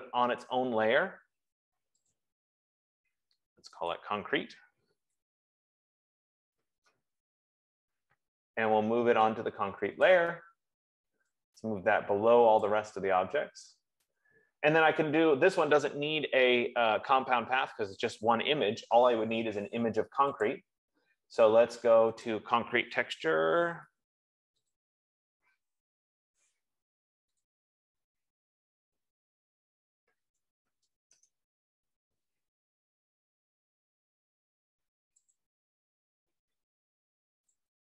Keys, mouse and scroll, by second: 2.6 click, 4.7 click, 5.8-7.4 typing, 10.6 click, 12.9 click, 20.5 F15, 21.5 click, 22.7 click, 25.1 click, 27.9 click, 28.4 ctrl+a, 29.4-31.8 typing, 35.7 click.